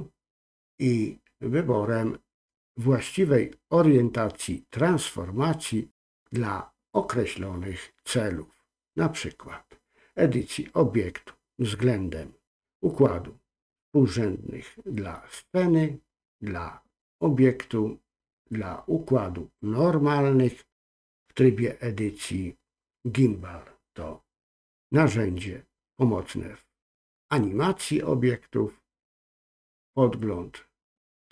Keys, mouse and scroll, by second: 0.3-31.3 drag.